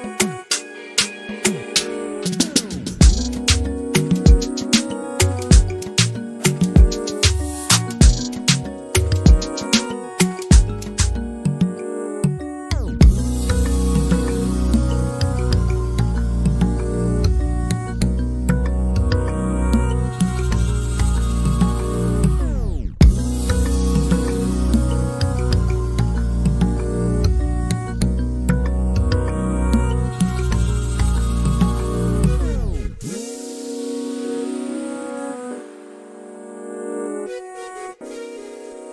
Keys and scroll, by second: 37.6 m.